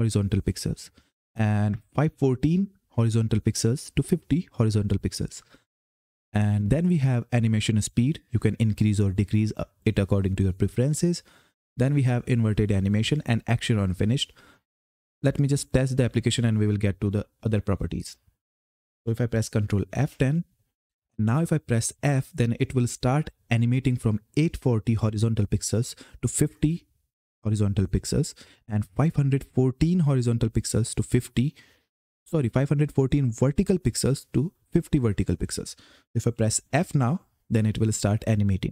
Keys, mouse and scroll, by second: 5.5 click, 15.4 click, 18.7 ctrl+Num_Lock, 18.7 click, 19.7 ctrl+F10.